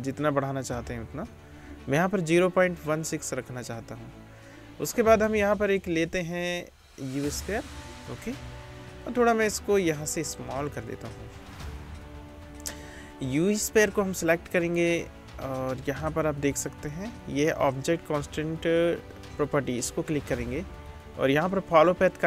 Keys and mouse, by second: 9.2 s, 10.3-19.4 drag, 19.4 middle click, 19.8-20.9 drag.